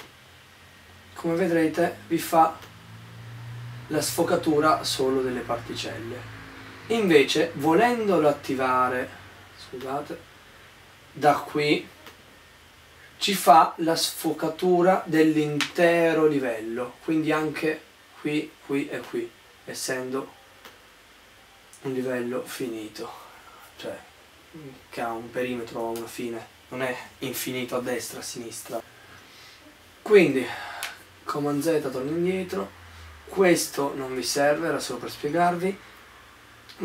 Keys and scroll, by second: 26.1 super+z, 30.6 super+z.